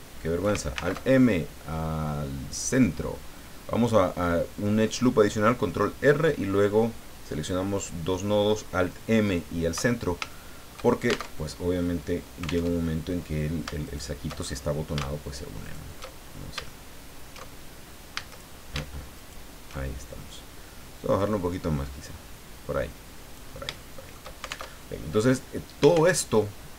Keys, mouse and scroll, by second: 0.7 alt+m, 2.6 click, 3.3-3.7 scroll down 2, 10.3 shift+middle click, 11.3 alt+shift+Tab, 12.6 alt+Tab, 13.8 alt+shift+right click, 14.4-14.9 alt+shift+scroll up 1, 14.9 middle click, 15.6 alt+shift+right click, 17.5-17.8 alt+shift+scroll down 1, 18.1 a, 19.1 alt+shift+right click, 21.2-23.5 drag, 23.8 shift+middle click, 24.6 alt+shift+Tab, 26.1 alt+Tab.